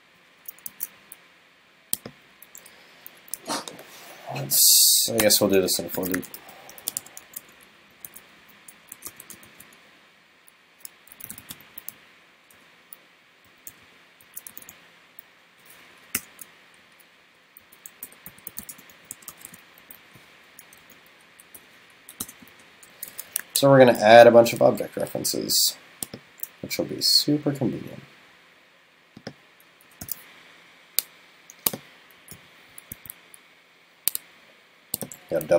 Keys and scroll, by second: 0.7 super+s, 23.2 super+Left.